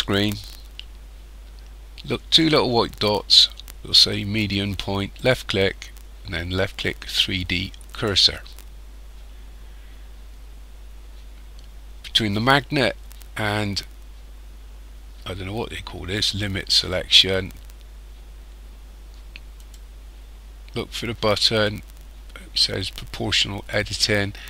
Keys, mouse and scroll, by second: 5.2 click, 19.6 click.